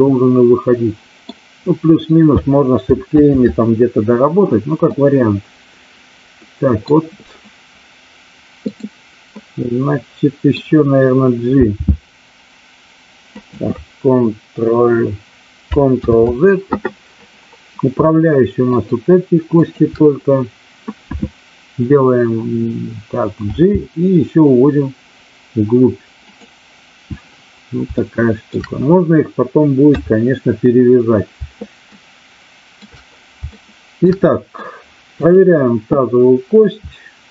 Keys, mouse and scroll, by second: 3.0 ctrl+z, 4.9-6.8 middle drag, 8.7 click, 9.3-10.6 middle drag, 11.6 g, 13.4 click, 15.9 ctrl+z, 18.6-19.2 shift+drag, 19.6 shift+click, 23.6 g, 26.3 click, 27.9-28.4 shift+middle drag, 29.8 KP_3, 31.8-32.8 shift+middle drag, 33.6-34.0 shift+middle drag, 34.2-34.6 middle drag, 35.2 click.